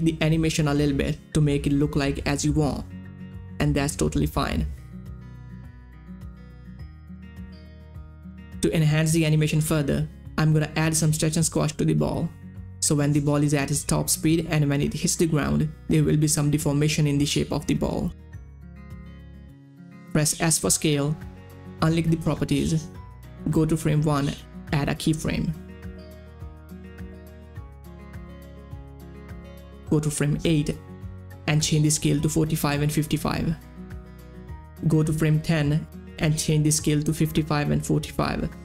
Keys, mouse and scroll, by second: 7.1 middle click, 10.9 middle click, 11.0-20.9 drag, 23.0-28.6 drag, 28.6 click, 28.8 u, 29.8-31.6 drag, 31.6 Page_Up, 32.9 click, 33.2-35.0 typing, 35.2 Return, 35.8 Page_Down, 36.7 click, 37.4 typing, 37.9 Caps_Lock, 38.5 Tab.